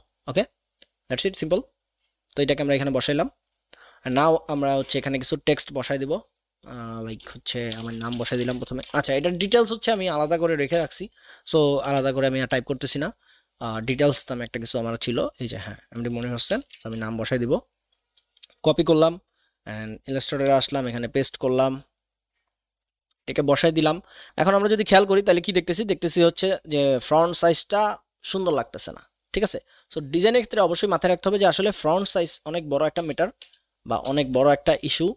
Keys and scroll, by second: 7.7-8.9 typing, 11.8 Delete, 16.2 ctrl+c, 16.5 alt+Tab, 20.2 ctrl+v, 32.9 ctrl+alt+KP_0, 33.4 KP_1, 34.0 KP_0.